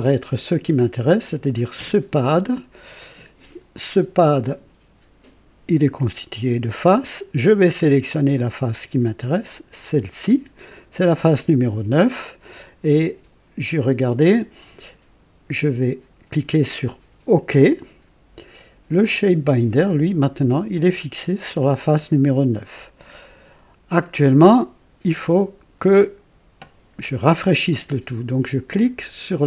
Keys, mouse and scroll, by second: 0.3 click, 1.7 space, 3.0 click, 3.9 click, 6.7-7.0 scroll up 1, 9.7 click, 17.3 click.